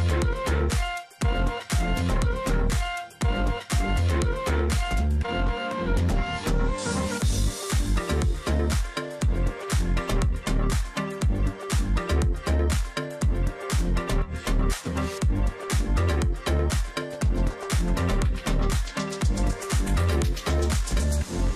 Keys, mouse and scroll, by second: 2.2 ctrl+z, 3.1 double click, 4.2 alt+scroll down 1, 4.5 space, 5.1-5.5 alt+scroll up 1, 5.5 space, 6.7 space, 7.5 ctrl+z, 8.8 ctrl+z, 11.6 alt+click, 13.3 ctrl+click, 13.4 ctrl+double click, 13.8 ctrl+z, 14.0 ctrl+click, 14.6 ctrl+double click, 16.1 shift+click, 17.2 alt+click, 17.9-18.3 alt+scroll down 1, 18.3 ctrl+click, 18.7 alt+scroll up 1, 20.9 shift+click.